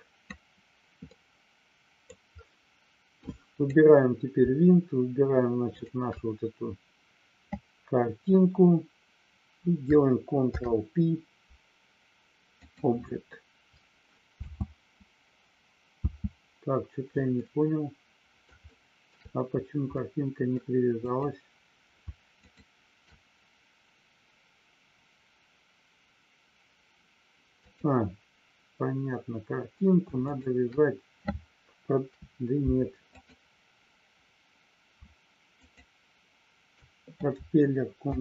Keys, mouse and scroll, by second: 1.1 middle click, 3.6 click, 5.8 shift+click, 14.3 space, 17.5-18.5 middle drag, 18.6 shift+middle click, 19.8 middle click, 20.9 click, 22.6 shift+click, 27.7 click, 30.2 shift+click, 33.2 click, 35.6 shift+click.